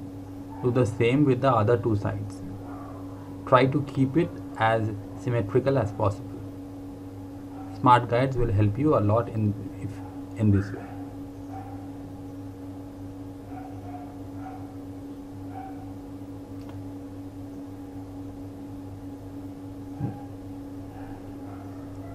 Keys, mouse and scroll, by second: 0.4 click, 5.9 click, 21.6 ctrl+z.